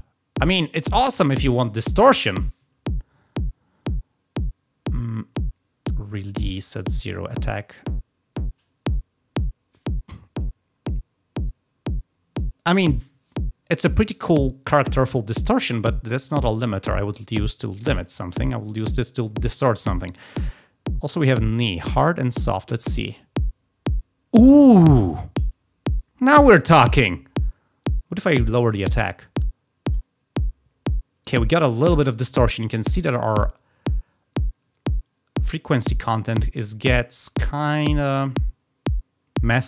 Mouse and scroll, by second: 7.0-12.3 drag, 21.5 click, 22.8 click, 28.5-29.9 drag, 37.7 click.